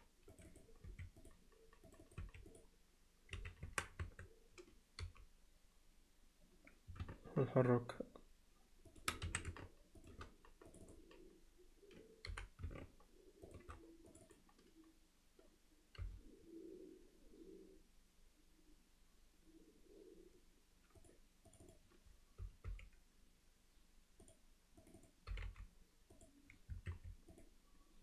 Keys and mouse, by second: 0.5 click, 0.9 q, 2.1 click, 2.2 q, 3.4 z, 3.7 Tab, 4.1 Tab, 5.0 g, 10.8 click, 14.2 click, 21.7 click, 25.0 click, 25.3 g, 26.9 q.